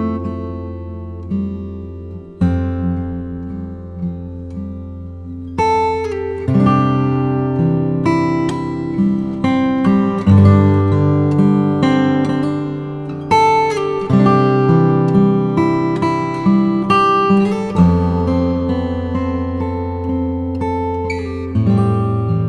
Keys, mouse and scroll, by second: 0.2 typing, 3.0 ], 3.2 click, 4.7 [, 5.2 ctrl+z, 5.7 ], 7.4 typing, 7.8 click, 10.0 click, 13.5 ], 16.5 typing, 17.6 click, 18.9 [, 22.1-22.4 typing.